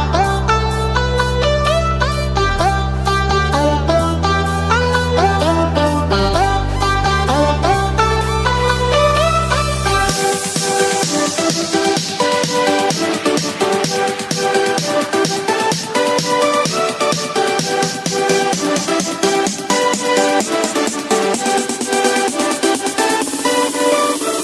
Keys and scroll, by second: 1.6 Delete.